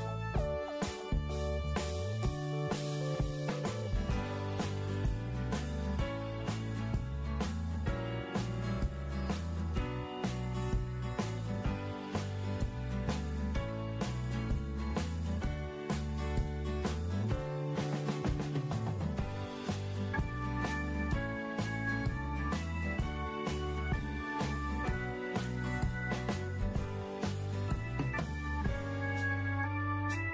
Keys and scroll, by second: 20.8 ctrl+shift+g.